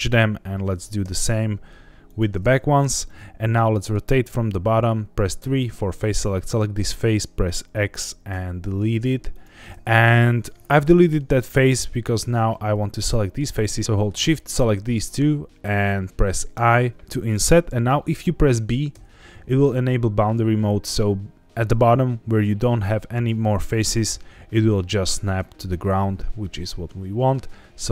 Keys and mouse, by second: 1.0 m, 3.0 middle click, 5.4 3, 5.9 click, 8.3 x, 10.4 middle click, 12.2 click, 12.7 middle click, 13.8 middle click, 14.4 shift+click, 14.9 middle click, 16.5 i, 18.9 b.